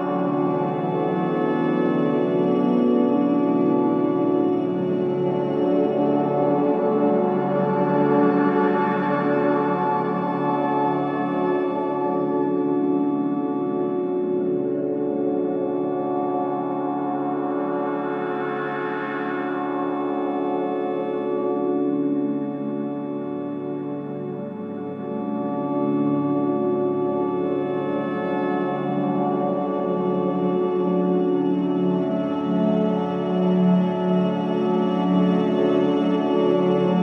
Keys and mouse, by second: 6.6-7.5 typing, 6.8 click, 8.0 click, 9.7-10.1 drag, 9.9-14.3 typing, 12.5-13.4 drag, 15.0 click, 16.0-20.5 typing, 21.5-22.3 typing, 27.7 shift+click, 29.3-30.1 drag, 29.8 space, 31.8 space, 32.0 space, 32.2-36.2 drag, 36.8 click.